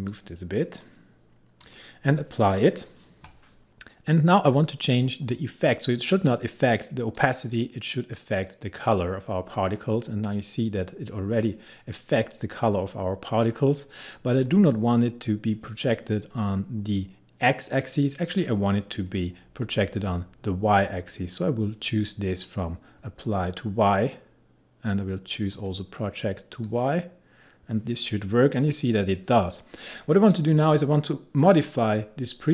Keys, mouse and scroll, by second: 7.2 click, 22.4 click, 25.6 click.